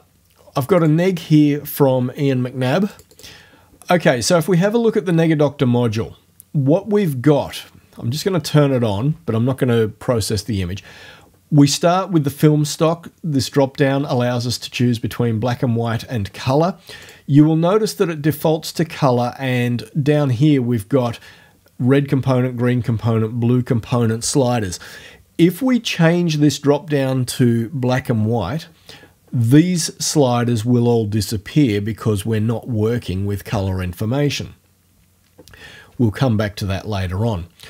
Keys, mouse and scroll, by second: 0.8 click, 3.0 click, 7.5 click, 7.8 middle click, 13.4 click, 13.7-17.1 middle drag, 17.1 click, 17.3-20.1 middle drag.